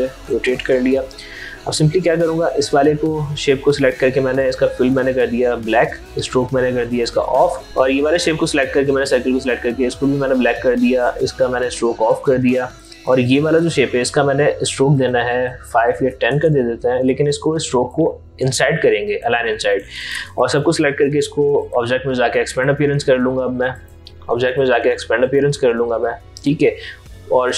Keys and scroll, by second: 15.6 ctrl+a.